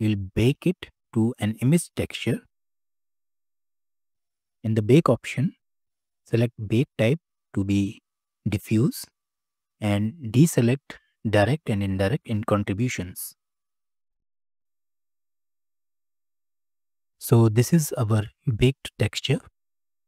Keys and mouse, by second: 0.3 shift+a, 6.4-8.7 drag, 11.3 click, 11.8 click, 15.5 click.